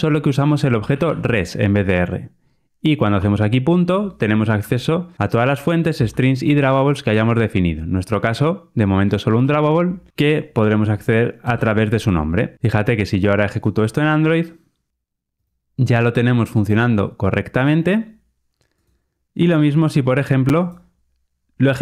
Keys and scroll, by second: 13.5 ctrl+r.